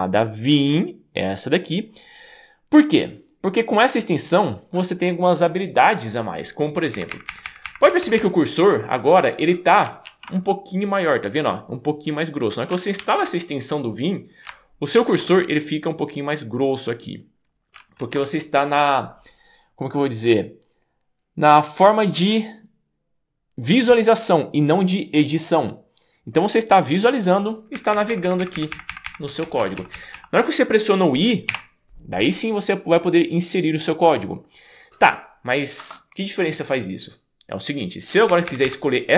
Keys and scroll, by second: 7.0 Up, 7.3 Up, 7.5 Up, 7.6 Up, 7.9 Down, 8.0 Down, 8.2 Down, 27.7 Up, 28.0 Up, 28.1 Up, 28.2 Up, 28.4 Up, 28.5 Up, 28.7 Up, 28.9 Up, 29.1 Up, 29.4 Down, 29.6 Down, 29.8 Down, 29.9 Down, 30.1 Down, 31.5 i, 35.8 Escape, 38.3 Up, 38.5 Up, 38.6 Up.